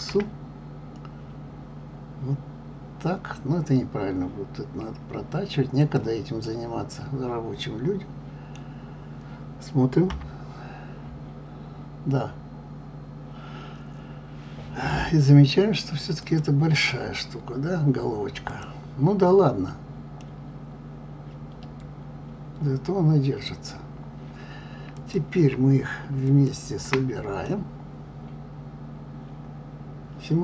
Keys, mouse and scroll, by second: 6.4-9.4 middle drag, 10.1 KP_3, 11.1 scroll up 2, 16.2 click, 18.5 click, 20.2-23.2 middle drag, 23.7-24.9 scroll down 3, 24.9 click, 26.3 shift+click, 27.4-30.4 middle drag.